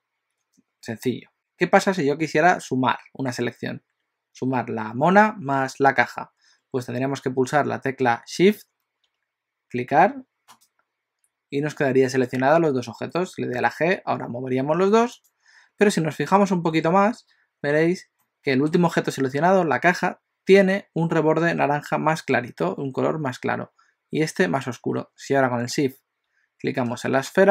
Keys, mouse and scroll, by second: 10.7 shift+click, 13.6 g, 16.4-16.7 scroll up 3, 17.6-18.3 scroll up 1, 18.3 middle click, 25.2-26.3 scroll down 2.